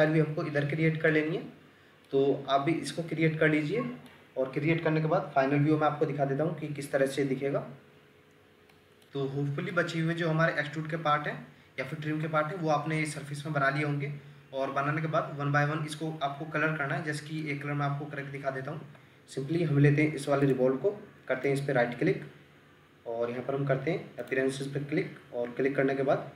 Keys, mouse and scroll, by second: 1.5-2.0 scroll down 1, 2.1 middle click, 8.7 middle click, 17.8-18.6 scroll down 1, 18.6 Escape, 21.4 right click.